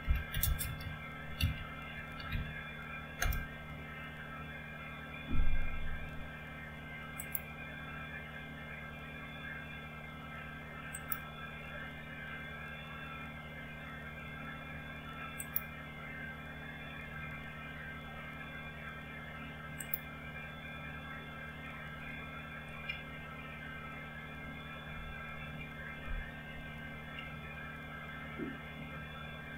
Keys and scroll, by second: 0.0-3.7 typing, 24.3 alt+Tab, 25.8 alt+Tab, 27.2 alt+Tab.